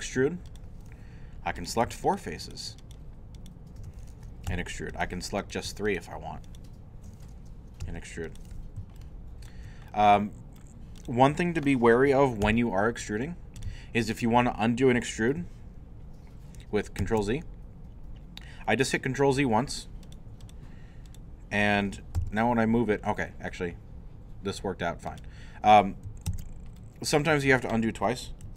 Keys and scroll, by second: 4.5 shift+e, 7.8 shift+e, 8.8 alt+e, 12.4 e, 17.0 ctrl+z, 22.2 g, 26.3 ctrl+z, 28.4 ctrl+z.